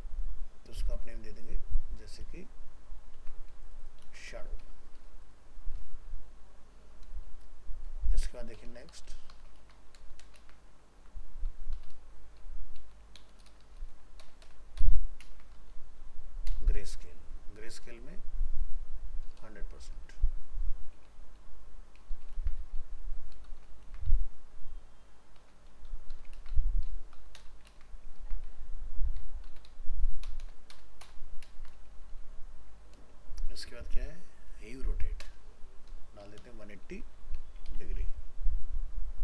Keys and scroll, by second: 2.3 ctrl+c, 4.0 ctrl+v, 9.6 ctrl+c, 10.3 ctrl+v, 13.2 ctrl+BackSpace, 15.2 ctrl+space, 22.1 ctrl+shift+Left, 22.3 ctrl+c, 23.5 ctrl+shift+Left, 23.8 ctrl+v, 26.3 ctrl+c, 27.7 ctrl+v, 30.3 ctrl+BackSpace, 31.4 ctrl+space.